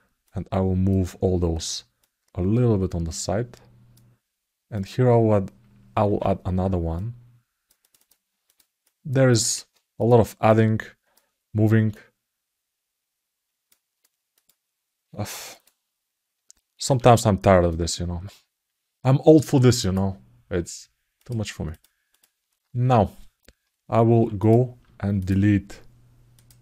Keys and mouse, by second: 0.0 click, 1.8-3.7 drag, 4.5 click, 7.7 click, 8.2 click, 8.6 click, 10.3 click, 11.7-13.5 drag, 14.1 click, 15.3 click, 16.6 ctrl+r, 21.0 click, 21.5 click, 21.8 click, 23.9 g, 24.2 click, 24.9 shift+click, 26.2 shift+click.